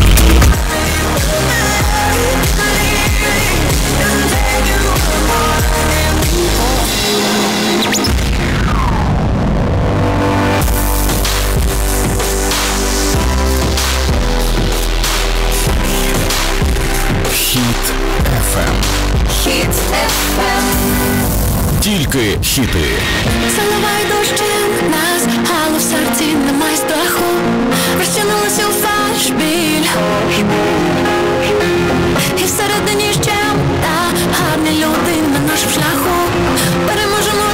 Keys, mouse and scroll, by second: 0.6 Page_Down.